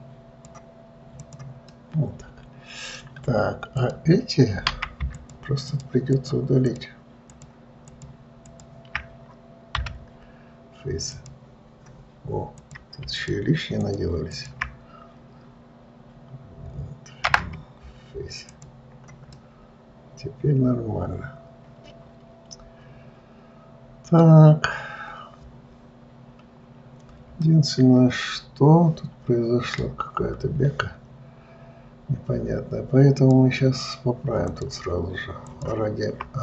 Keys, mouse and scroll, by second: 1.5 click, 2.0-4.1 middle drag, 4.1 click, 5.5 shift+click, 6.0 shift+click, 6.4 shift+click, 6.9 shift+click, 7.6 shift+click, 8.2 shift+click, 8.8 shift+click, 10.1 Delete, 12.9 click, 13.4 shift+click, 14.1 shift+click, 14.6 shift+click, 17.6 Delete, 19.7-22.7 middle drag, 25.0-26.1 scroll up 3, 26.1-27.2 scroll down 1, 27.2-27.8 scroll up 1, 27.8-30.8 middle drag, 33.5 click, 34.8 click, 35.8 shift+click.